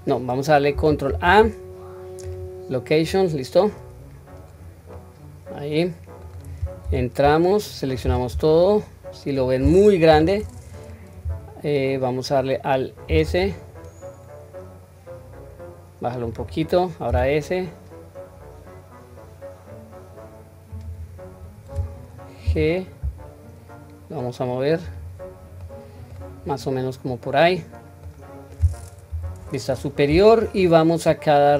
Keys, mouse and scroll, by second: 1.1 ctrl+a, 4.9-6.3 middle drag, 6.8 Tab, 8.0 a, 8.6 middle click, 10.1 KP_1, 13.1 alt+s, 25.6 middle click, 26.3-27.1 scroll down 1, 27.1-28.2 middle drag, 27.1-28.2 scroll down 1, 29.1 KP_7.